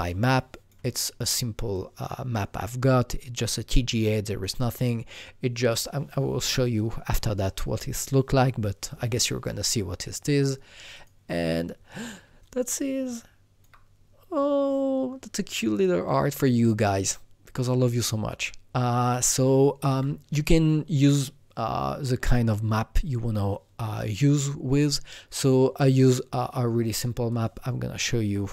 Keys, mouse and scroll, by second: 11.0-12.4 drag, 12.4-16.0 alt+drag, 16.9 alt+Num_Lock, 16.9-22.4 alt+drag, 24.7-27.3 alt+drag, 27.3-28.5 alt+drag.